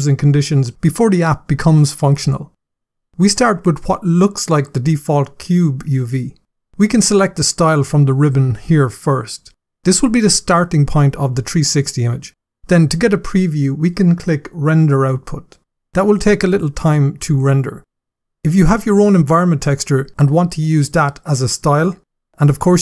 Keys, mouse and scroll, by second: 0.0 scroll up 1, 0.7 scroll up 1, 2.3-5.2 scroll up 6, 5.2-6.2 scroll up 2, 7.6 click, 14.0 click.